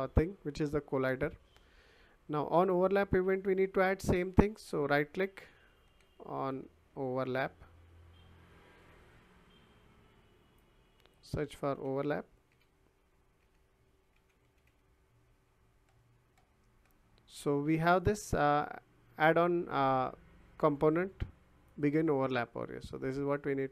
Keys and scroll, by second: 5.9 o, 6.5 n, 8.8 o, 11.7-15.1 typing.